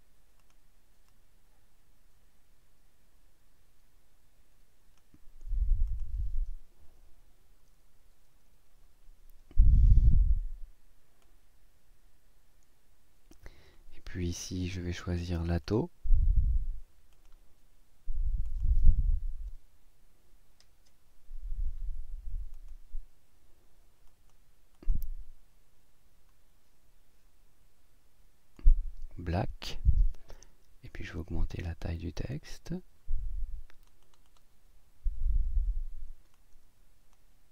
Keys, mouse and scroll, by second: 0.4 click, 1.1-5.2 drag, 5.9 click, 7.0 Right, 7.8 Up, 10.0 click, 11.2-13.5 drag, 15.0 click, 17.1 click, 18.4 click, 19.5 l, 21.6 scroll down 1, 22.5 click, 24.1 click, 24.8 click, 28.6 click, 31.2 click, 36.3 click.